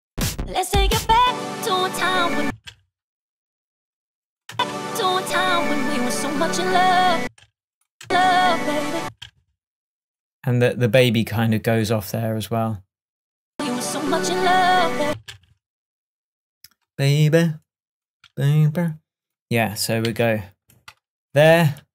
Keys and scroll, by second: 2.5 space, 4.6 space, 7.2 space, 15.1 space, 20.1 super+e.